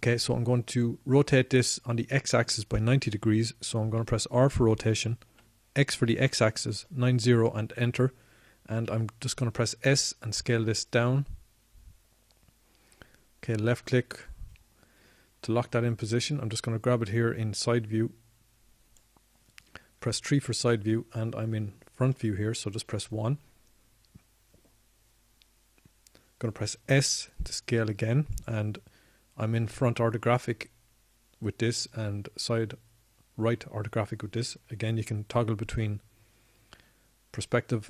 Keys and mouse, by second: 7.2 r, 12.1 s, 18.2-21.9 drag, 23.3 KP_3, 25.5 KP_1, 30.1 s.